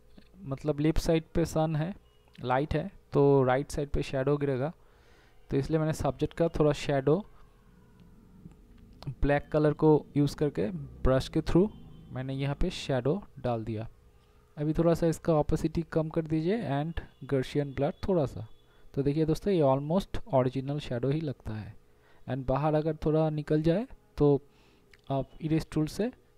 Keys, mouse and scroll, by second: 13.7 ctrl+0, 18.0 z, 18.9 e, 19.4 [, 20.3 [, 24.6 [, 25.7 right click.